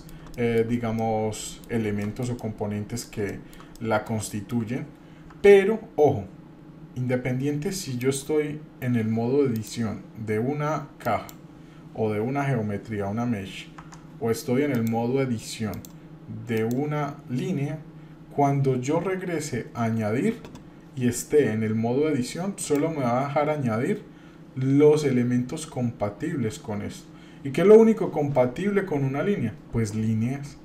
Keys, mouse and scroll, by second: 0.3 shift+middle click, 1.0-2.2 middle drag, 2.4 middle click, 3.3 shift+middle click, 3.7 middle click, 4.3 shift+middle click, 5.3 Tab, 8.0 click, 9.5-11.3 drag, 13.8 Tab, 14.7 click, 15.7-16.7 drag, 22.6-30.6 drag.